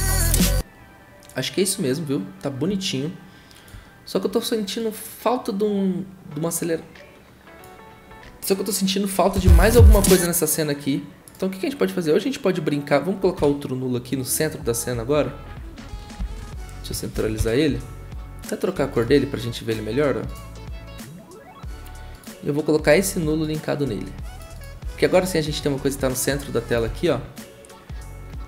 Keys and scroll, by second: 9.3 0, 13.4 `, 16.2 ctrl+alt+shift+y, 17.1 ctrl+alt+Home, 24.8 s, 26.9 ctrl+z.